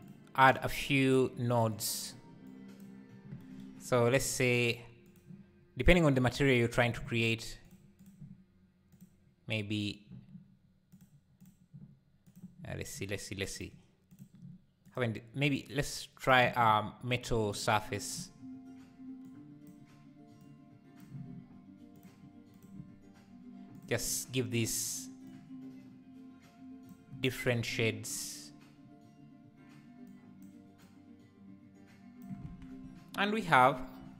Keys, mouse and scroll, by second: 4.5-5.8 drag, 7.7 click, 11.0-12.3 drag, 13.6-14.9 drag, 17.6 click, 22.0-23.7 drag, 28.2-32.5 drag, 32.5 alt+a.